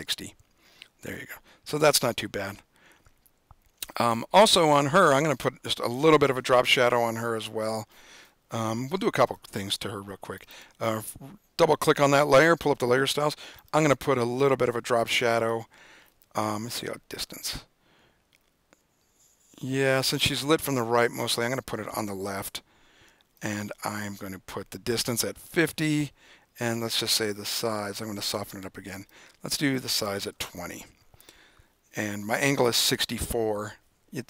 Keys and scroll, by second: 25.3-26.0 typing, 30.2-31.0 typing.